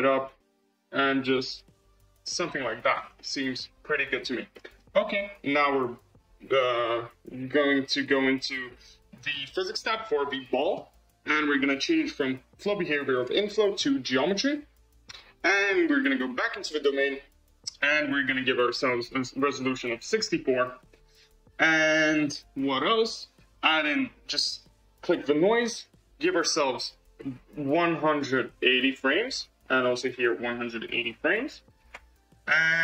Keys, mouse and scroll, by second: 2.0 scroll, 2.2-2.9 middle drag, 2.9 scroll, 3.1-4.3 middle drag, 4.5-5.7 middle drag, 5.7 click, 8.3 click, 13.0-15.5 drag, 16.0 click, 18.5-20.7 drag, 21.1-22.5 scroll down 8, 22.5-24.5 scroll down 2, 25.0 click, 26.5-29.1 drag, 29.7-32.2 drag.